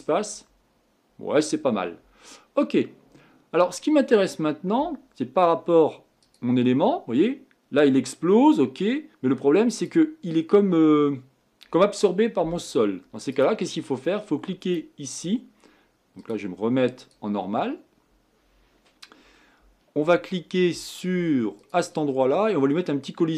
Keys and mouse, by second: 6.8-8.1 drag, 10.1-11.4 drag, 17.1-22.1 drag.